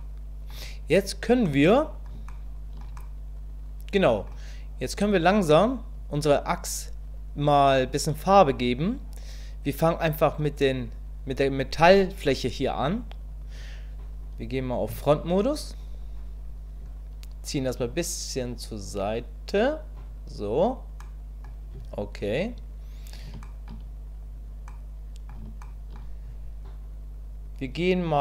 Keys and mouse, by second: 1.5 middle click, 2.3 shift+middle click, 3.0-4.3 middle drag, 3.6 click, 14.9 KP_1, 17.8-20.1 drag, 21.1 middle click, 23.4 shift+middle click, 24.7 middle click, 25.6 shift+middle click.